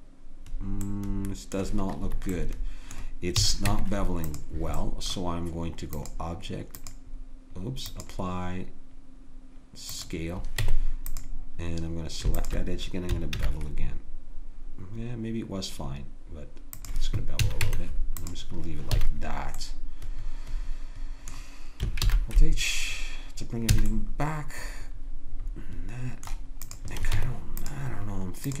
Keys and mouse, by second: 3.4 a, 3.7 Tab, 10.6 Tab, 13.4 ctrl+b, 17.4 a, 17.6 Tab, 19.0 a, 19.6-21.0 middle drag, 22.0 alt+h, 23.8 a, 26.6 click, 27.1 Tab.